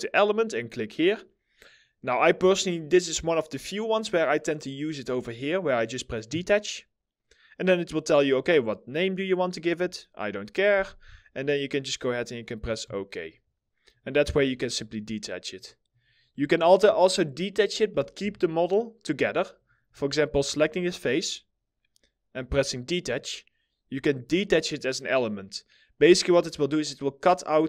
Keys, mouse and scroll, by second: 16.0 middle click, 16.3 scroll down 1, 16.7 alt+middle click, 17.8 alt+middle click, 17.8 4, 19.8 alt+middle click, 20.2-22.3 scroll up 1.